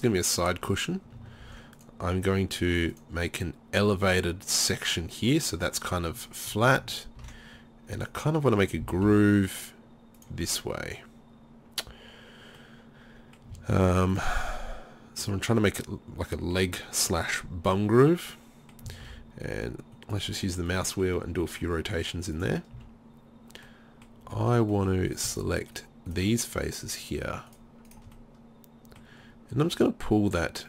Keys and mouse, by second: 1.4 ctrl+r, 7.2 ctrl+r, 8.9 s, 13.0 middle click, 13.8 ctrl+r, 16.3 middle click, 19.1 ctrl+r, 20.8 click, 22.4 click, 22.8 z, 23.7 click, 24.3 z, 25.1-29.7 right drag, 29.7-30.6 drag, 29.7-30.6 middle drag.